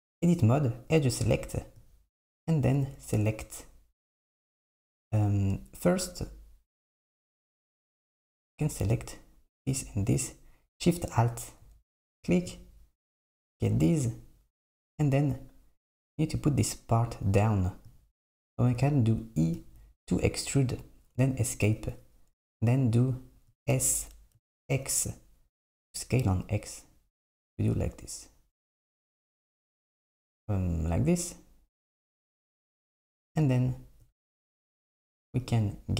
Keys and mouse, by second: 4.3 click, 5.0 click, 7.6 alt+click, 11.2 alt+shift+click, 12.5 click, 19.6 e, 23.8 s, 35.6 click.